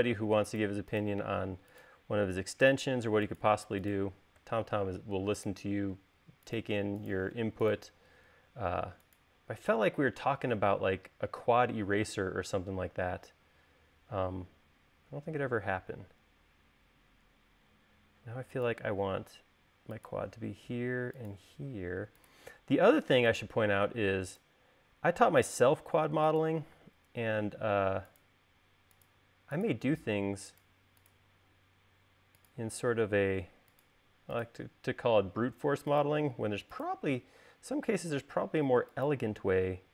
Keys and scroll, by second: 18.0 l, 26.8 space, 38.0 space.